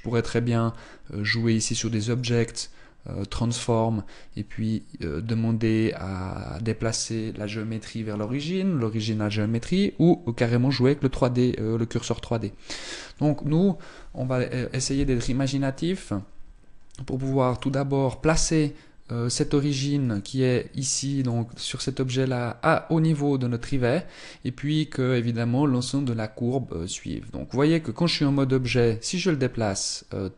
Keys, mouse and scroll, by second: 0.9 click, 1.9 click, 14.5 KP_1, 15.6-17.1 scroll up 1, 17.1 right click, 19.7 right click, 20.9 right click, 21.2 right click, 28.3 g.